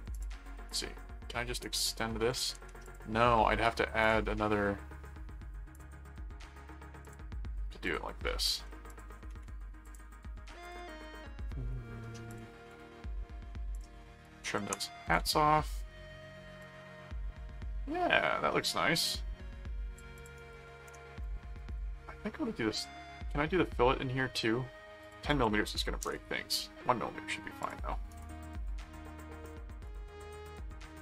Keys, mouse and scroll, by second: 0.1 click, 2.8 click, 4.0 click, 5.7 click, 7.0 click, 7.8 click, 8.9 click, 9.8 ctrl+click, 10.6 ctrl+click, 12.3 click, 13.7 click, 16.6-19.9 drag, 20.1 click, 20.4 right click, 21.7 click, 25.0 click, 27.6 click, 28.1 right click, 29.8 click.